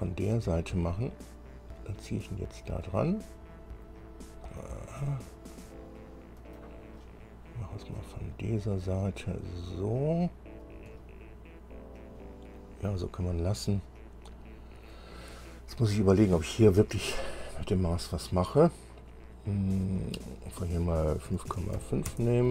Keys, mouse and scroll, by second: 0.9-3.1 drag, 3.1-6.9 middle drag, 7.2-8.3 middle drag, 9.1-11.0 drag, 11.1-13.2 drag, 14.1-15.3 drag, 17.8 scroll up 1, 18.5 scroll up 1, 20.5 click, 21.5 KP_5, 21.7 KP_Decimal, 21.9 KP_5, 22.3 KP_Enter.